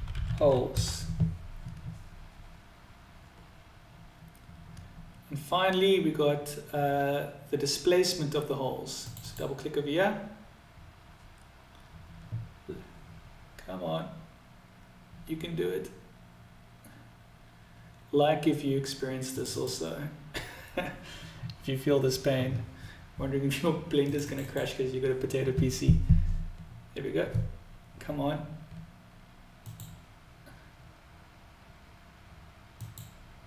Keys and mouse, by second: 29.5-32.9 drag.